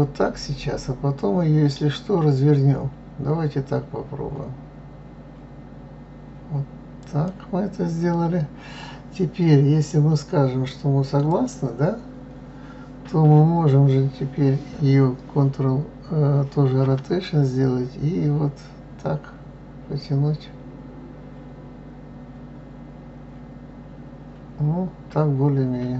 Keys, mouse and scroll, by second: 11.2-14.3 drag.